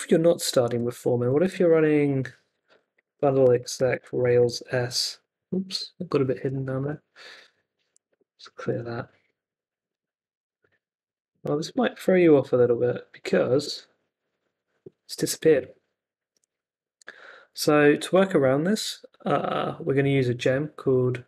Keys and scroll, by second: 0.6 super+Tab, 1.7 ctrl+c, 2.4-4.9 typing, 6.4 s, 6.8 Return, 8.1 super+k, 9.9 super+Tab, 11.9-12.9 typing, 13.6 Return.